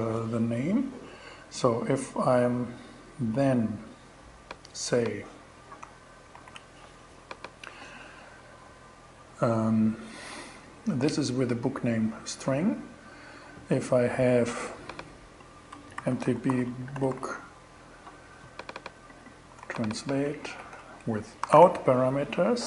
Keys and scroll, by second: 5.8 super+c, 15.2-17.0 typing, 19.1 super+c, 20.0 super+v, 20.9 alt+super+5, 21.0 alt+6.